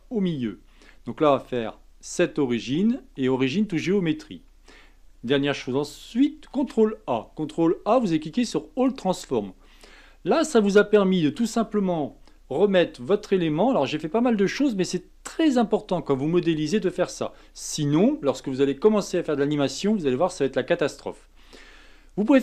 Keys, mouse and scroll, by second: 6.5 ctrl+a, 9.5-9.9 scroll down 2, 9.9-12.9 middle drag.